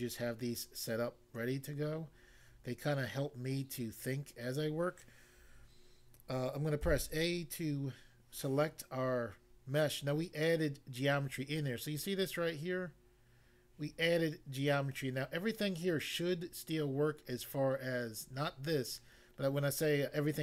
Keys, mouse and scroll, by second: 2.6-2.9 scroll up 1, 3.4-3.8 scroll up 1, 6.9 a.